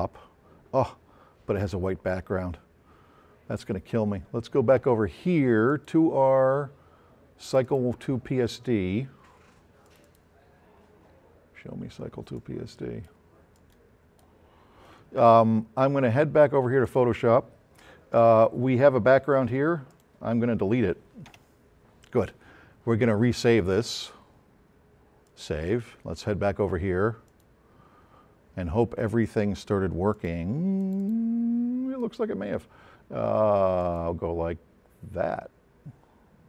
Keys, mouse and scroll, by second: 5.7 click, 7.5 click, 9.9-10.8 drag, 12.4-13.2 drag, 13.6-14.4 drag, 16.9 click, 19.9 click, 25.3 click, 30.1 click, 30.8 click.